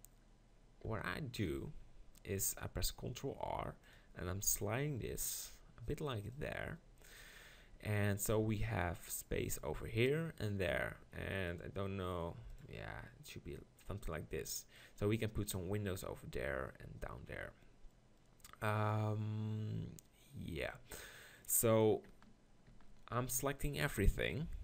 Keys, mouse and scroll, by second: 1.4 click, 1.7 ctrl+r, 6.4-8.4 drag, 22.7 ctrl+l.